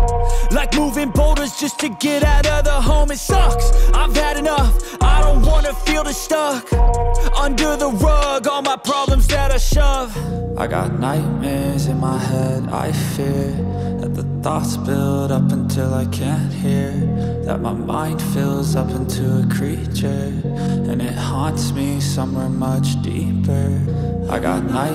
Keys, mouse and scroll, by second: 6.4 double click, 19.6 double click.